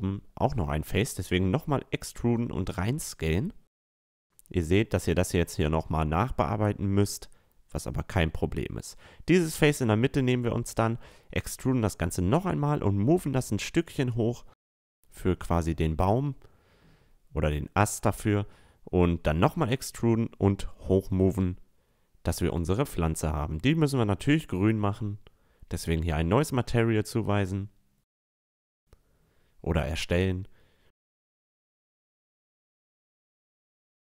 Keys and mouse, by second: 0.3 e, 0.8 right click, 1.0 s, 4.8-9.8 right drag, 6.5-9.3 drag, 9.8-11.6 middle drag, 10.6 e, 11.8-13.5 drag, 15.2 e, 15.7 s, 18.9 e, 21.2 a, 23.1-24.9 right drag, 24.6-27.7 drag, 29.0-30.8 drag, 31.6-33.4 drag.